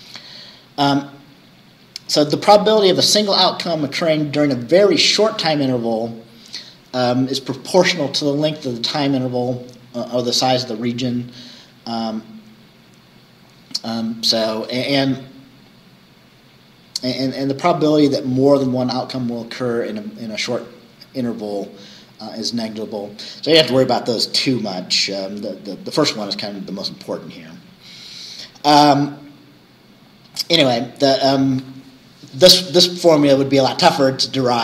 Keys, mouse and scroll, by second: 24.6 scroll down 2, 27.2 scroll down 2, 29.1-29.4 scroll down 2.